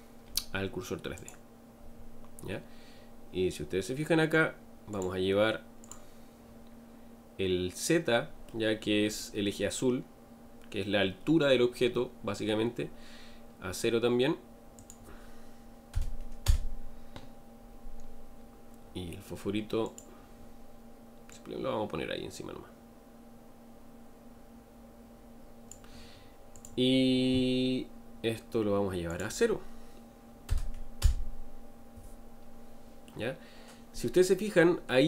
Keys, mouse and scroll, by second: 8.5-12.5 middle drag, 16.4-19.9 drag, 31.0-33.0 drag, 33.0-35.0 middle drag.